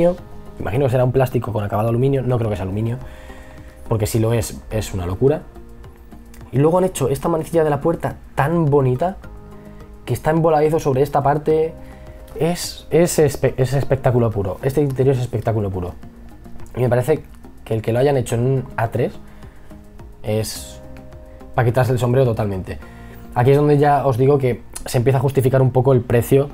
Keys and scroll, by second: 3.1 e, 4.4 b, 14.4 e, 15.3 b.